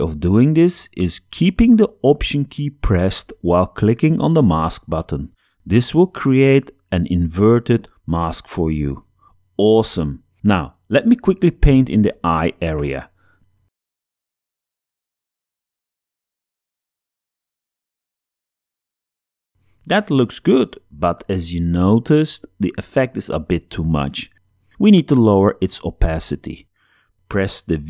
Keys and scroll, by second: 12.5 ], 14.2 space, 16.2 x, 17.4 space, 19.0 super+0.